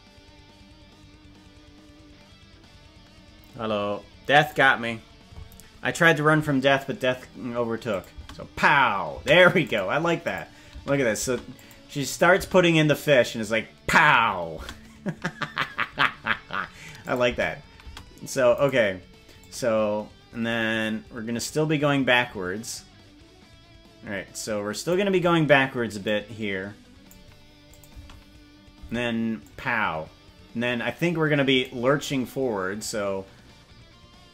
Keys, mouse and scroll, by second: 7.9 click, 8.2 space, 9.2 space, 9.6 click, 10.2 click, 10.8 space, 11.2 space, 11.5 click, 12.0 click, 12.4 space, 14.6 space, 15.6-16.0 scroll up 4, 16.0-16.6 scroll down 3, 17.0 click, 17.4 space, 17.8 space, 18.6 right click, 19.4-24.9 drag, 26.0-27.1 drag, 27.7 click, 27.9 space, 28.8 space, 29.4-31.6 drag.